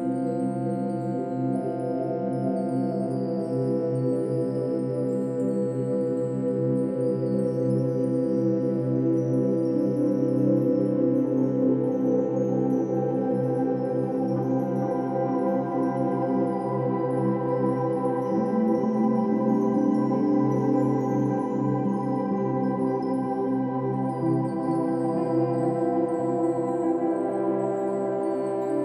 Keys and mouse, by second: 0.7 click, 1.5 click, 2.3-5.3 typing, 4.2 click, 4.8 click, 5.6-7.0 drag, 6.8-10.3 typing, 9.7 click, 10.6-11.9 drag, 14.3 click, 15.9 click, 18.0 click, 18.9-21.3 typing, 22.0-23.6 drag, 23.5-24.2 typing, 25.9-27.7 drag, 27.9-28.8 drag.